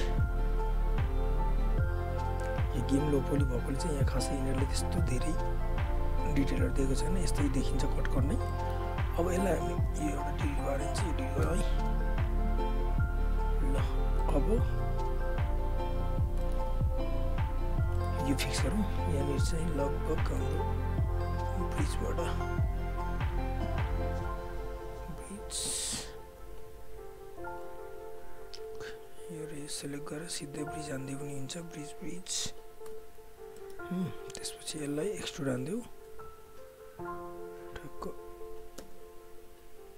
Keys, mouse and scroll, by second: 0.7 right click, 1.5 click, 2.4 alt+right click, 2.6-8.5 alt+drag, 8.5 alt+middle click, 9.8 alt+click, 9.9 right click, 11.1 click, 11.9 Delete, 12.8 alt+click, 14.2 alt+middle click, 14.4 alt+right click, 14.5 alt+click, 14.9 right click, 16.0 click, 16.4 alt+middle click, 16.5 alt+scroll up 1, 16.7 alt+click, 17.0 alt+right click, 17.1 alt+right click, 17.2 alt+click, 17.9 alt+middle click, 18.7 alt+click, 19.2 right click, 20.4 alt+middle click, 20.6 alt+right click, 21.8 click, 24.9 click, 25.2 click, 27.5 w, 27.6 right click, 28.7 click, 29.8-33.3 shift+right drag, 33.3 alt+click, 33.5 alt+middle click, 34.3 click, 34.7 w, 35.3 shift+right click, 36.4 w, 37.1 click, 38.8 space.